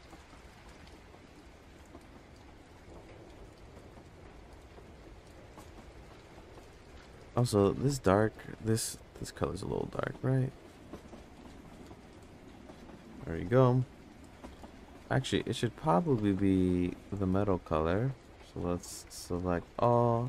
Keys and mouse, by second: 1.4-2.4 drag, 7.6 click, 8.9 drag, 11.9 click, 16.2 click, 19.2 Tab, 19.2 a.